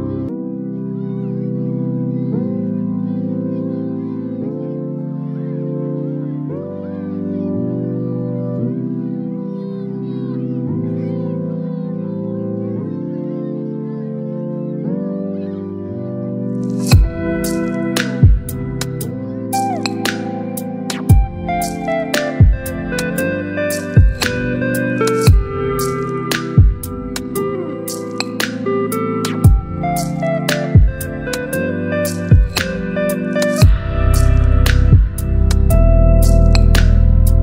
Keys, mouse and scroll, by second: 8.5-8.8 drag, 9.8 ctrl+c, 12.1 click, 14.7 ctrl+v, 15.6 Return, 17.3 click, 19.9 ctrl+t, 21.7-24.9 drag, 27.2-32.0 shift+drag, 33.3-35.5 shift+drag, 36.5 t.